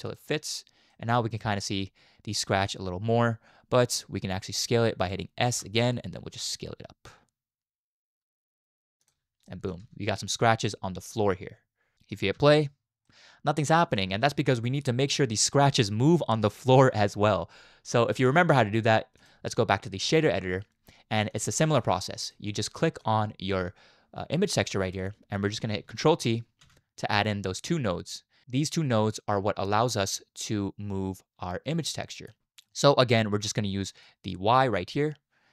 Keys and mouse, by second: 0.9 middle click, 2.5 middle click, 5.5 s, 9.4 middle click, 9.8 Tab, 10.7-12.1 middle drag, 12.3 space, 13.0-13.4 middle drag, 13.4 drag, 13.6 middle click, 14.2 space, 19.2-20.2 drag, 21.3-22.3 drag, 22.6 middle click, 23.0-25.0 drag, 26.7 ctrl+t, 28.1-28.4 drag, 29.5 click, 30.4-32.3 drag, 32.7 middle click, 34.0-35.5 drag.